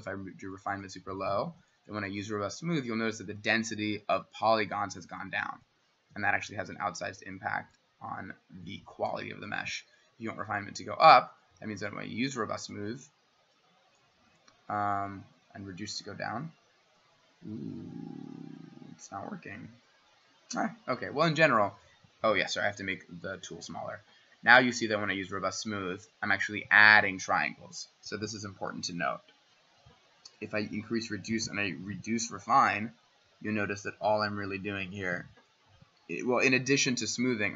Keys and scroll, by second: 6.1 w, 12.7 w, 22.6-23.5 [.